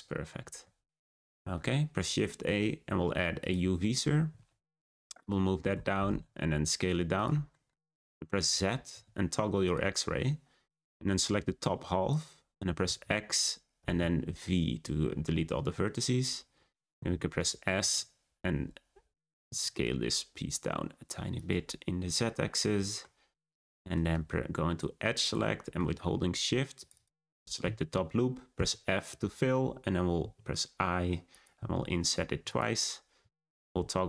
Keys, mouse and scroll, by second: 0.2-1.3 scroll up 1, 1.3 shift+a, 4.3 g, 5.7 Tab, 5.9 a, 6.0 s, 7.5 shift+middle click, 7.8-8.9 scroll up 6, 8.9 z, 10.8 click, 12.8 x, 15.7-16.9 scroll up 1, 16.9 a, 17.7 s, 22.7 middle click, 23.3-23.7 scroll down 2, 23.7-25.2 shift+middle drag, 25.2 click, 25.6-26.7 middle drag, 26.7 click, 26.9 click, 28.5 f, 30.1 i, 31.5 i, 33.1 z.